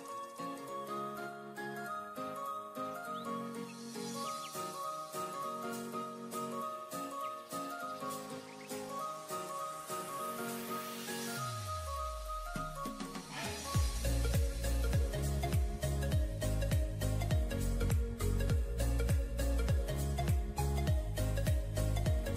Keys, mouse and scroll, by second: 2.8 alt+scroll up 1, 6.6 alt+scroll down 1, 8.3 double click, 10.2 alt+scroll up 1, 13.7 ctrl+j, 15.3 [, 15.4 [, 15.6 [, 17.2 double click, 20.7 double click.